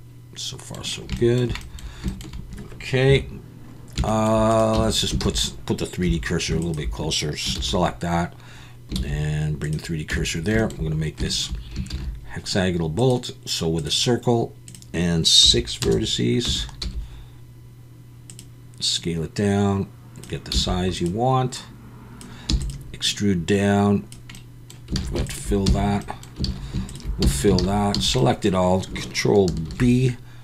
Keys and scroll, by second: 3.1 KP_1, 4.7 Tab, 5.2 alt+a, 6.0 2, 7.5 shift+s, 9.0 shift+s, 10.1 Tab, 11.9 shift+a, 16.5 Tab, 16.8 s, 20.5 s, 22.5 e, 25.0 alt+a, 25.6 f, 26.4 alt+a, 27.2 f, 27.6 alt+a, 29.7 ctrl+b.